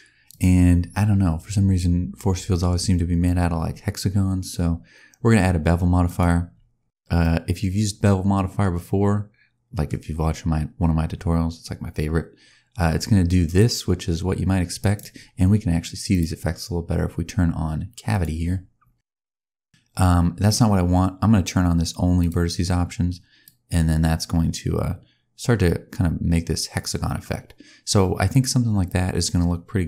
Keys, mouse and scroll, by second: 0.2 click, 6.7-7.1 scroll up 2, 7.1 middle click, 10.0-11.8 scroll up 1, 13.5 click, 16.0 click, 18.9 middle click, 22.1 click, 23.3 click.